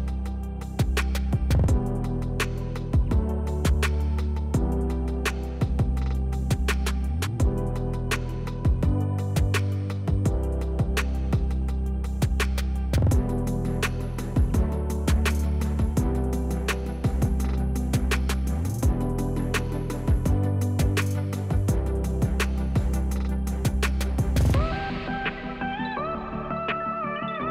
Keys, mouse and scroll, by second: 0.8 Tab, 1.1 click, 1.7 f, 2.5 g, 3.7 click, 4.3 e, 5.1 click, 5.4 s, 5.8 click, 6.0 e, 6.7 click, 7.0 s, 8.1 click, 8.3 shift+middle click, 8.5-9.2 scroll up 1, 9.2 e, 9.8 click, 10.1 s, 10.5 click, 10.7 e, 11.6 scroll down 1, 11.9 shift+middle click, 12.3 click, 13.2 e, 14.1 Escape, 14.6 ctrl+z, 16.4 click, 17.1 e, 18.0 click, 18.8 s, 19.4 click, 19.6 middle click, 20.2-20.8 scroll down 1, 20.8 click, 21.2 click, 21.6 click, 22.0 i, 22.5 click, 22.9 KP_1, 24.4 click, 24.6-25.7 shift+middle drag, 25.7 click, 26.8 Tab, 27.1 click, 27.3 click.